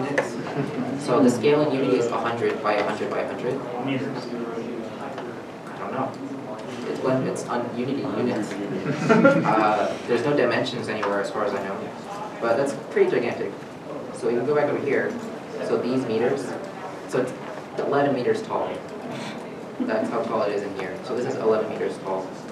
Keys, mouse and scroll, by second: 12.9 right click, 13.4 alt+Tab, 18.8 alt+Tab, 19.4 alt+Tab, 19.4 alt+Tab, 20.5 middle click.